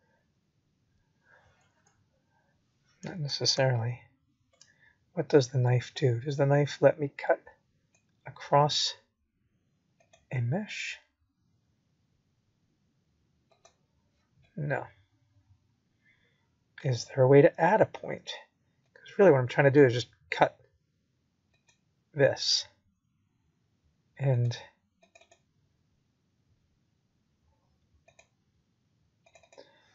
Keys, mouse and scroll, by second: 2.1 scroll up 2, 2.9 scroll down 2, 4.5 click, 9.5 click, 12.1 click, 21.1 scroll up 2, 22.4 shift+middle click, 25.0 click.